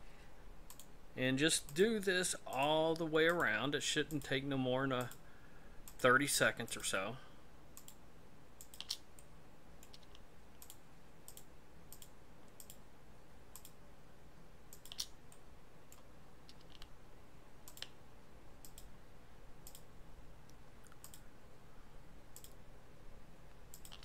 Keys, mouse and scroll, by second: 1.6-8.8 shift+right click, 9.2 middle click, 10.6 shift+right click, 15.3 middle click, 16.2-16.6 scroll down 2, 17.7-24.0 shift+right click.